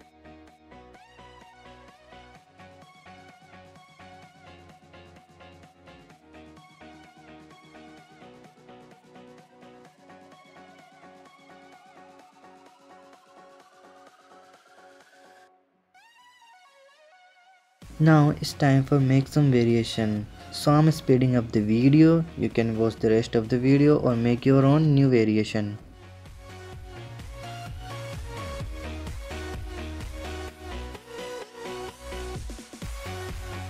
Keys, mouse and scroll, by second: 0.0 alt+h, 1.0 click, 1.4 click, 1.7-2.1 scroll up 6, 2.1 click, 2.4 click, 2.6 click, 3.1-4.1 drag, 6.7 click, 7.4 click, 8.0 space, 8.5 click, 8.7 KP_0, 8.9 middle drag, 9.1 scroll up 1, 9.3 ctrl+shift+middle click, 9.8 click, 10.0 middle click, 10.3 click, 10.5 click, 11.0 click, 11.2-12.2 drag, 13.0-14.0 middle drag, 17.9 middle click, 18.1-18.5 scroll down 5, 18.5 click, 18.8-20.2 typing, 18.9 click, 19.1 click, 19.4 click, 19.7 click, 19.9 click, 20.6 click, 20.7 click, 20.9 click, 21.7 click, 21.9 click, 22.1-22.7 scroll down 11, 22.7 shift+click, 23.7 ctrl+click, 24.0 ctrl+click, 24.6 ctrl+click, 24.9 ctrl+click, 25.4 h, 25.6 click, 25.7 middle drag, 25.9 click, 26.1 click, 26.4 KP_7, 26.8 shift+d, 29.6 g, 31.9 click, 32.6 middle click, 33.5 shift+a.